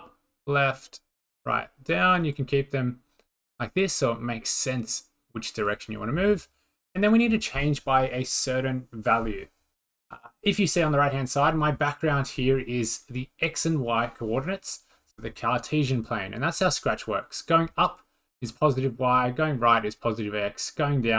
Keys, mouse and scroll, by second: 1.2 click, 3.4 click, 4.0 click, 6.1-7.7 drag, 9.1-10.8 drag, 11.1 click.